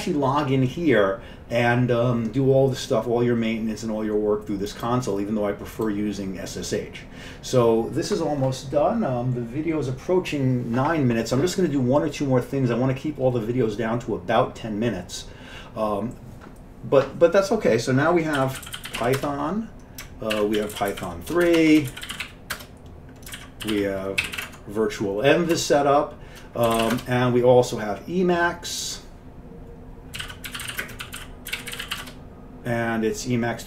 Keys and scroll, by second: 18.2-27.5 typing, 23.4 ctrl+d, 30.0-32.8 typing.